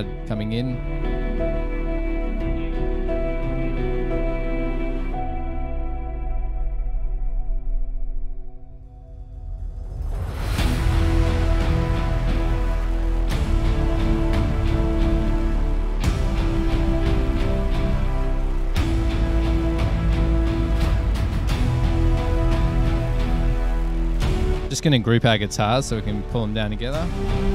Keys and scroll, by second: 27.4 super+g.